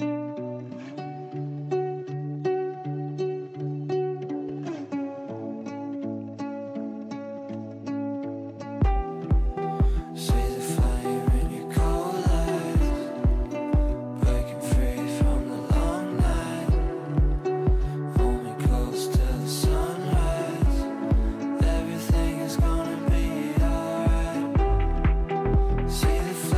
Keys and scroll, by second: 4.7 Right, 10.9 Delete, 18.6 shift+Page_Up.